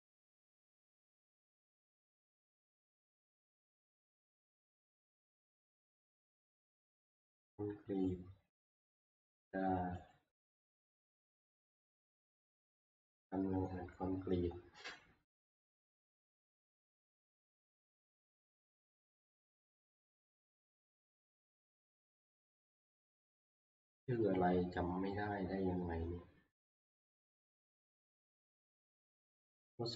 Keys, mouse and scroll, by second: 0.1 scroll, 6.1 click, 8.1 click, 10.1 click, 12.0 click, 13.7 click, 14.9 middle click, 15.3 scroll down 2, 16.0-16.9 scroll down 2, 20.9 scroll up 2, 22.2-24.1 scroll up 2, 26.3-26.7 scroll down 2, 27.3 scroll down 2.